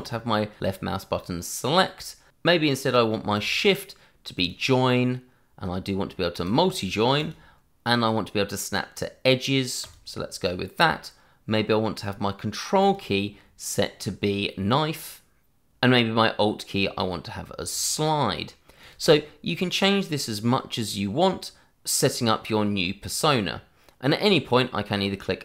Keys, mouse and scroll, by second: 1.2 click, 3.3 click, 7.1 click, 9.8 click, 12.8 click, 15.7 click, 16.2 click, 17.7 click.